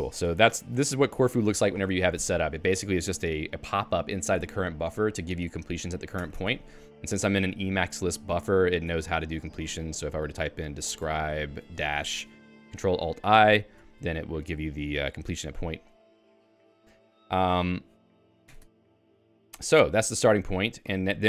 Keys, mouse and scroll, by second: 1.0 Down, 1.8 Down, 1.9 Down, 2.2 Down, 2.4 Down, 2.7 Down, 3.1 Down, 4.0 Down, 4.3 Down, 4.5 Down, 4.7 Down, 4.9 Down, 5.2 Up, 5.4 Up, 5.6 Up, 5.7 Up, 5.9 Up, 6.2 Escape, 6.6 Escape, 6.8-12.3 typing, 7.2 Escape, 13.3 ctrl+alt+i, 18.4 Escape, 19.1 ctrl+g, 20.4-21.2 typing.